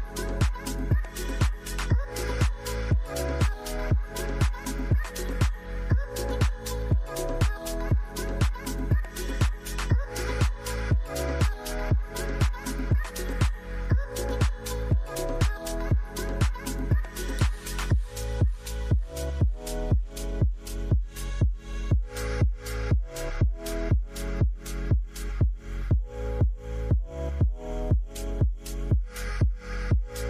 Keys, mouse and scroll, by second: 0.6 shift+click, 2.1 shift+click, 3.6 typing, 7.5 shift+click, 11.6 shift+click, 12.7 typing, 17.0 shift+click, 19.9 shift+click, 20.8-21.6 typing, 23.5 double click, 24.8 ctrl+z, 25.6 double click, 27.8 right click.